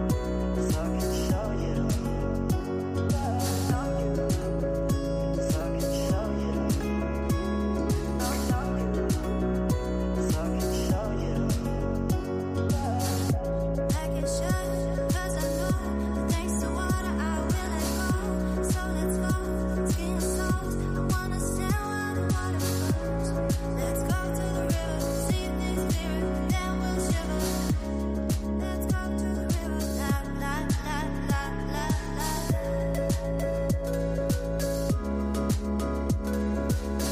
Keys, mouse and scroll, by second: 12.5-13.1 scroll down 4, 13.1 scroll up 5, 13.6-16.1 middle drag, 16.1 scroll down 2, 16.6-17.8 middle drag, 17.8 m, 20.3 l, 25.8 click, 27.0-29.4 scroll down 52, 29.4 click, 30.0 click, 30.4-32.6 scroll up 52, 32.6 click, 33.4-34.7 middle drag, 34.7-37.1 drag.